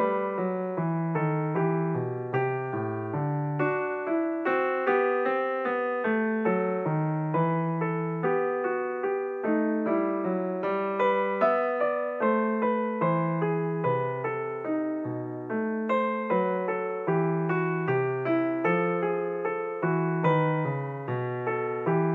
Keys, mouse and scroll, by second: 0.8 ctrl+r, 2.6-4.2 scroll up 1, 4.3 alt+click, 6.0 g, 9.5 s, 11.7 click, 13.5 ctrl+r, 16.4 click, 17.7 ctrl+r, 20.0 click, 21.3 ctrl+r.